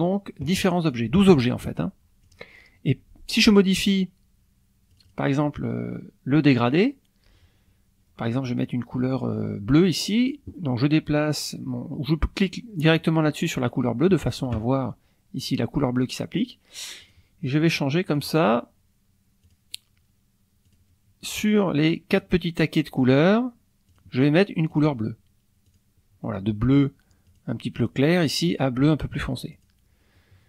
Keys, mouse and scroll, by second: 0.9 click, 2.2 click, 4.9 click, 13.0 click, 17.0 click, 18.2 click, 19.4 click, 20.7 click, 22.1 click, 23.2 click, 23.9 click, 24.7 click, 25.7 click, 27.3 click, 29.5 click, 30.2 click.